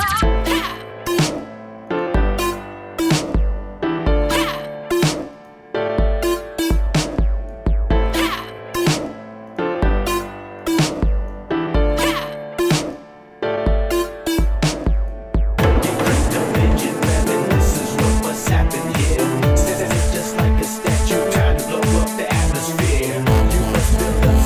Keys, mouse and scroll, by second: 6.8 drag, 8.7 click, 9.6 click, 16.1-18.4 drag, 22.4-23.3 drag, 23.3-24.3 right drag, 24.3 click.